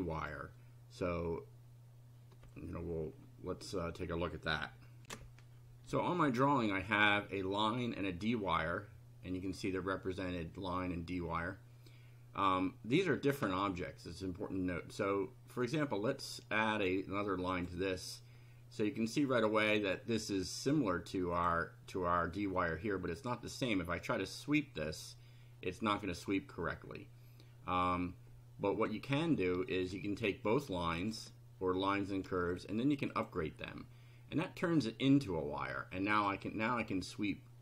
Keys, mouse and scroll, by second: 0.1 click, 5.0 ctrl+r, 9.4 click, 15.7 click, 17.6 click, 19.9 click, 21.3 click, 23.2 click, 29.7 shift+click, 30.9 ctrl+click, 33.1 click, 36.1 click.